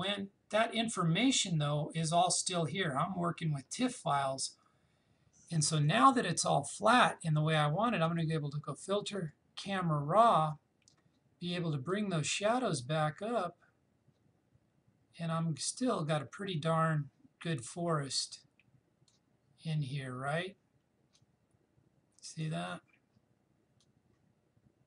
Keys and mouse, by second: 8.1 click, 11.9-24.8 drag.